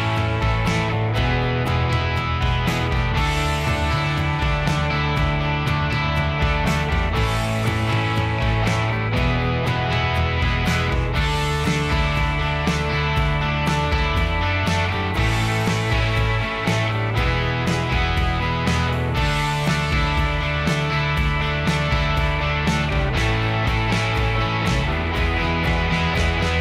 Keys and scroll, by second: 2.1 Escape, 4.0 h, 6.1 h, 11.1 p, 12.5-13.0 Escape.